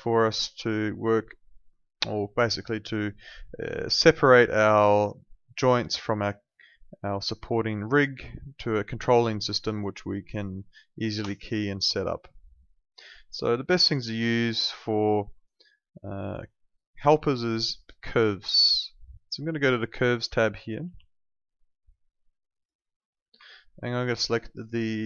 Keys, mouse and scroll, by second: 0.2 alt+click, 9.3 alt+click, 9.6 alt+right click, 10.0 alt+middle click, 10.7 alt+click, 11.8 alt+click, 12.5 alt+middle click, 15.4 alt+click, 18.5 click, 20.8 ctrl+2, 23.3 Escape.